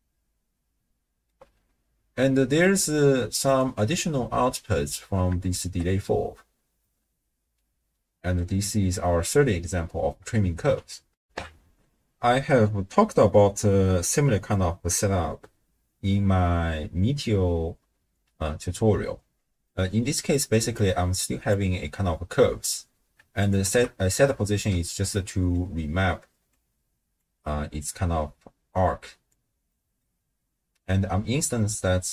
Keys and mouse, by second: 3.6 click, 5.5 shift+space, 6.9-8.3 drag, 11.2 ctrl+alt+shift+w, 11.3 ctrl+alt+shift+q, 19.8 middle click, 20.8 click, 23.4 alt+shift+click, 24.3-24.7 middle drag, 25.1 middle click, 26.5 click, 27.8-29.3 drag, 29.7 click, 29.7 middle click.